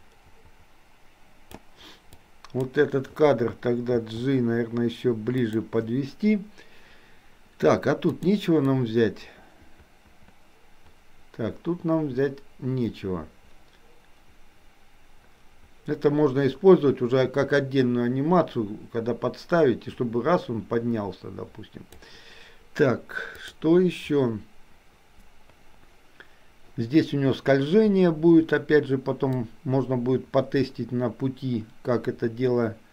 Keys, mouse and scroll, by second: 2.3-2.7 drag, 4.2 g, 8.2 click, 8.8-22.2 drag, 23.4 click, 29.5-32.9 drag.